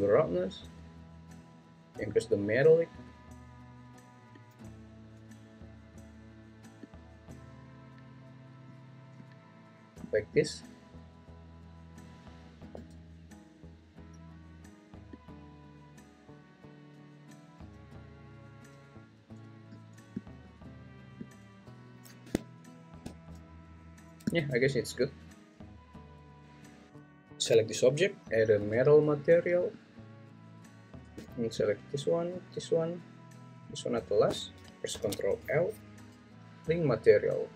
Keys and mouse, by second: 0.1 click, 2.1 click, 4.3-5.9 drag, 6.8-8.6 drag, 15.1-19.5 drag, 27.4 g, 28.2 Escape, 28.4-29.6 drag.